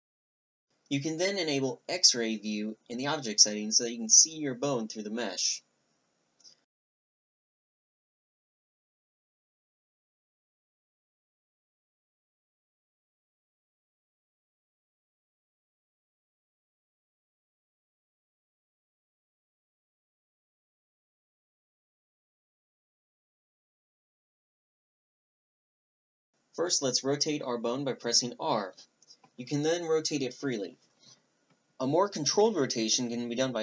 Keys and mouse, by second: 4.7-6.3 drag, 7.7 g, 13.4 click, 18.7 z, 21.0-25.3 middle drag, 25.6-27.6 drag, 27.5 r.